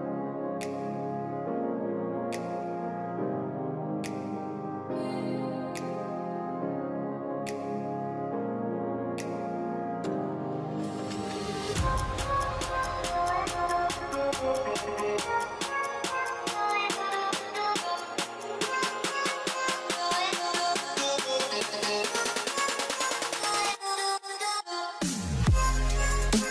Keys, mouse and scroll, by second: 0.0-0.5 typing, 7.5-8.3 typing, 12.6-14.0 typing, 26.1-26.5 typing.